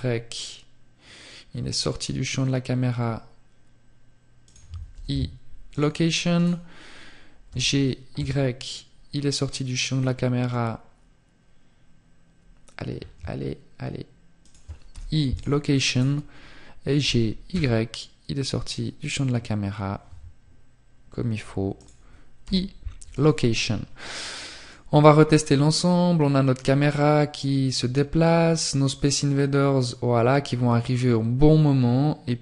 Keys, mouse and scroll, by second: 3.1 click, 3.1 i, 4.6 right click, 12.7 shift+click, 14.3 right click, 20.7 click, 20.7 i.